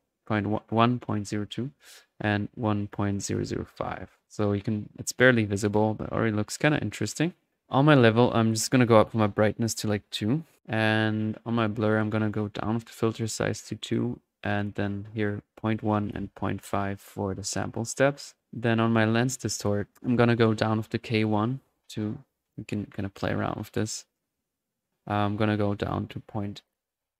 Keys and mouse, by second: 0.7 click, 4.2-5.0 drag, 7.5 click, 7.7-8.8 drag, 11.6 click, 12.3 click, 14.4-14.8 drag, 17.5 drag, 18.5 drag, 18.8-19.2 drag, 20.3-20.7 drag, 23.2-25.0 drag, 25.1-27.1 drag.